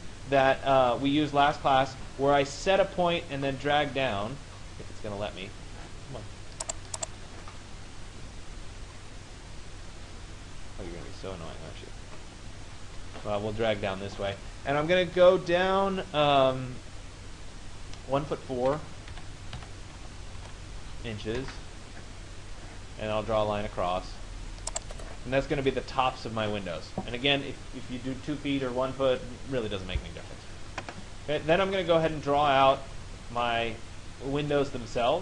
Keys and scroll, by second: 19.2 1, 19.6 4, 21.4 Return.